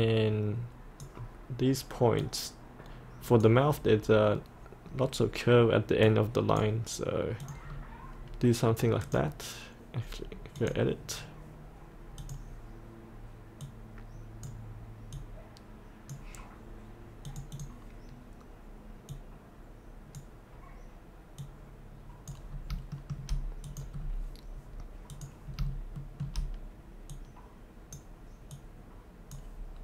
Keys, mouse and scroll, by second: 7.8-9.1 scroll up 1, 9.1 click, 15.6-22.6 drag, 22.6 scroll up 1, 23.0 shift+middle click, 23.7 click, 24.0-25.2 scroll down 1, 25.2 click, 26.0 shift+middle click, 27.1-29.8 drag.